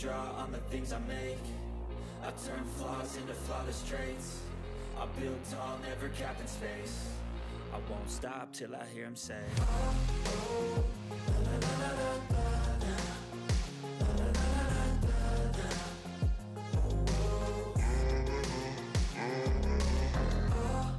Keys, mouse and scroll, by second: 1.3 click, 6.2 click, 6.2-8.8 drag, 9.5 6, 9.7 ctrl+s, 14.0-16.8 drag, 16.8 ctrl+s, 17.3 click, 18.7 click, 19.4-20.9 typing.